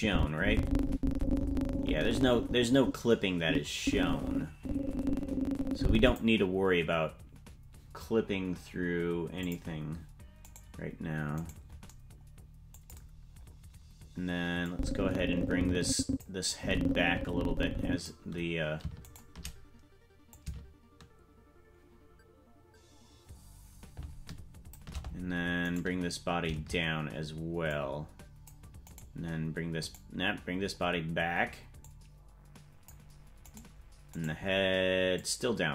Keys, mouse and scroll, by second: 9.4 click, 10.5 right click, 11.5 right click, 13.3 scroll down 3, 14.7-16.2 drag, 14.7-16.2 scroll down 1, 16.5-18.1 drag, 19.1 shift+right click, 20.3-24.8 shift+drag, 25.8 right click, 27.7 click, 29.0 right click, 29.9 right click, 30.7-31.8 scroll down 2, 31.8-32.9 drag, 33.6 right click, 34.2 right click, 35.2 click.